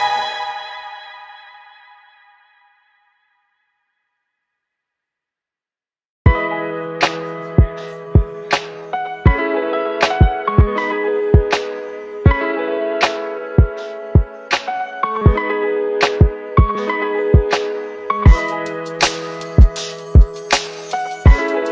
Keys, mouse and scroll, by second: 1.0 click, 5.5 shift+click, 5.7 shift+Up, 8.2 shift+click, 8.5 shift+Down, 9.5 click, 17.0 click, 20.0 ctrl+c, 21.6 click.